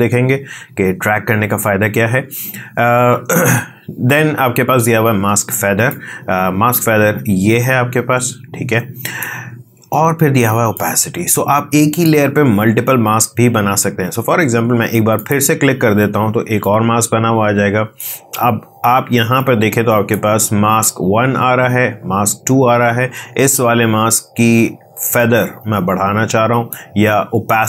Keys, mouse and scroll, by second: 16.9-20.7 drag, 26.4-27.6 drag.